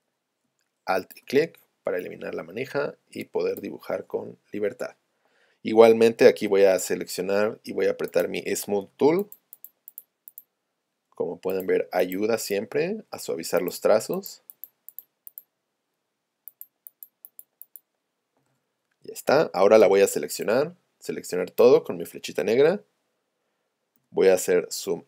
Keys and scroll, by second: 6.5 v, 8.9 s, 18.9 shift+super+a, 19.8 v.